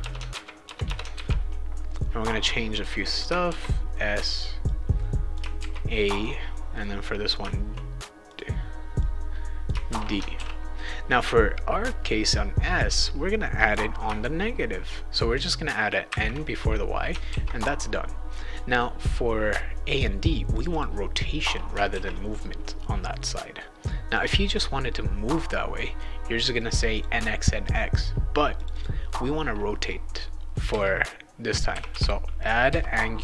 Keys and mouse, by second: 0.0 Return, 0.3 ctrl+v, 0.6 Return, 0.8 Return, 1.1 ctrl+v, 2.8 click, 3.4 shift+s, 4.1 click, 4.6 click, 5.6 shift+a, 6.1 click, 6.8 click, 8.3 click, 9.0 click, 9.9 shift+d, 10.3 ctrl+s, 13.6 click, 16.1 shift+n, 17.3 ctrl+s, 20.5 click, 20.7 click, 21.9 ctrl+s, 24.4 click, 26.6 click, 28.6 click, 28.7 click, 30.7 a, 31.7 d, 31.9 d, 32.6 a.